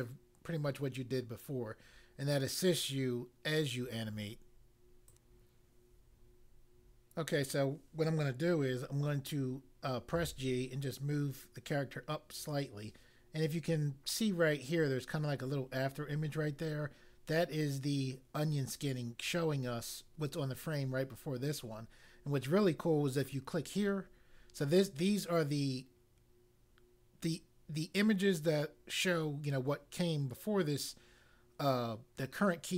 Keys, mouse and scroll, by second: 5.0 click, 10.1 g, 12.4 click, 23.2 click.